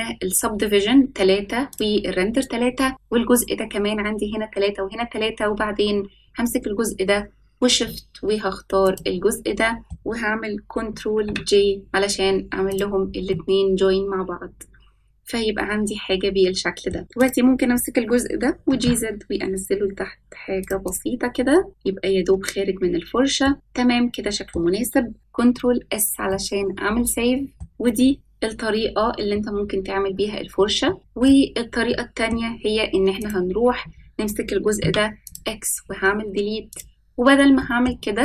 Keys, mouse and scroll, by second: 1.6 click, 2.9 click, 8.8 shift+click, 9.8 middle click, 11.2 ctrl+j, 12.6 click, 13.2-16.9 middle drag, 17.1 click, 18.5 g, 20.8 click, 21.2-21.7 scroll down 1, 21.7-23.4 middle drag, 23.5-24.5 middle drag, 25.5 ctrl+s, 26.2-27.5 middle drag, 27.5 click, 27.8-30.0 scroll down 1, 30.0-30.8 scroll up 3, 30.8 shift+middle click, 31.8-32.2 middle drag, 33.1 click, 34.7 x, 35.7-36.0 scroll up 2, 36.7 click, 36.7 scroll up 1, 37.5 middle click.